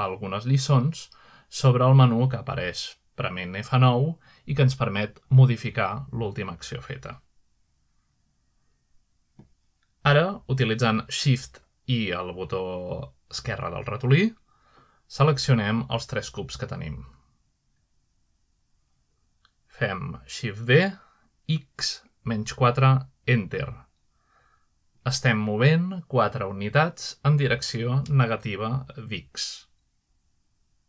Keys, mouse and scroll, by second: 0.0 click, 0.9 click, 1.9 click, 2.4 click, 5.7 F9, 9.2 click, 10.8 shift+middle click, 11.2 shift+r, 12.9-13.2 shift+middle drag, 14.3-15.1 shift+middle drag, 16.9 shift+click, 17.7 shift+click, 22.2-22.9 middle drag, 24.0-26.7 typing, 26.5 Return, 27.5-29.5 middle drag.